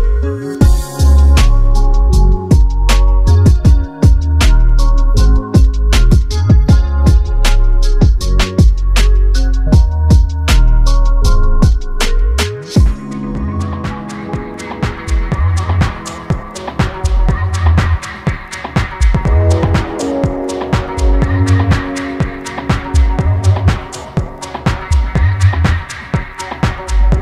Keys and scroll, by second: 16.5 ctrl+KP_Add, 16.6 ctrl+KP_Add, 16.7 ctrl+KP_Add, 16.9 ctrl+space.